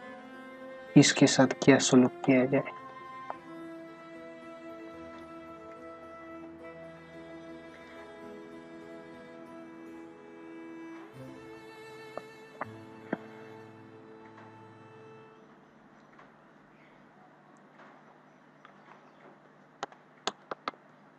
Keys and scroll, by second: 2.1 space, 19.8 space, 20.5 ctrl+alt+z.